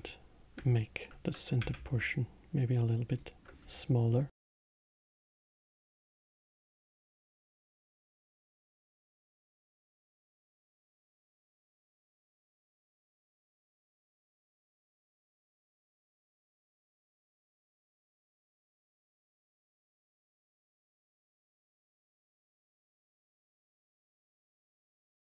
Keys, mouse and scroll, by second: 0.6 alt+click, 1.6 s, 3.6 Tab, 5.3 middle click, 6.3 Tab, 7.4-10.4 middle drag, 11.1 click, 13.7 click, 14.5 click, 15.4-17.0 drag, 17.0-18.9 alt+middle drag, 18.9-19.4 scroll up 2, 19.4-22.9 middle drag, 22.9-23.3 scroll down 3, 23.3-24.7 middle drag, 24.7-25.3 scroll up 9.